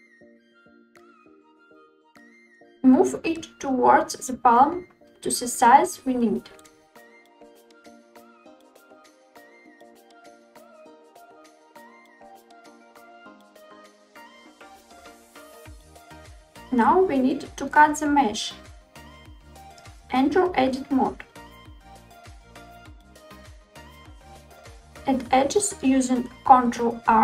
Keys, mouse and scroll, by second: 0.4 scroll up 1, 0.5-1.0 shift+middle drag, 1.2 scroll up 3, 1.6-2.2 shift+middle drag, 4.2 click, 4.5 click, 5.9 click, 6.5 click, 7.3-7.7 scroll down 3, 7.6 scroll up 1, 7.7 scroll down 2, 7.9 shift+middle click, 8.5 click, 9.8 s, 11.2 click, 13.5 click, 14.0 click, 14.8-15.2 middle drag, 15.2 scroll up 2, 15.4-16.0 shift+middle drag, 19.3 Tab, 25.0 ctrl+r.